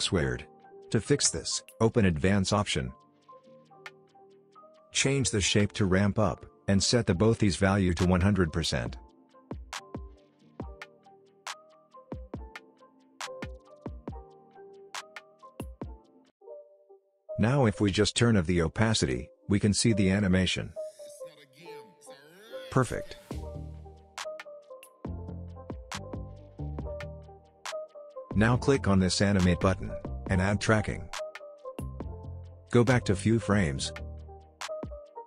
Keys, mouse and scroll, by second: 0.3-0.9 click, 1.2-2.0 scroll down 1, 2.0 click, 2.4-3.3 scroll down 1, 3.3-9.0 drag, 11.7 space, 14.0-15.6 drag, 16.7 scroll up 1, 17.4-19.8 drag, 21.0 space, 23.4-25.3 drag, 31.3-35.2 drag.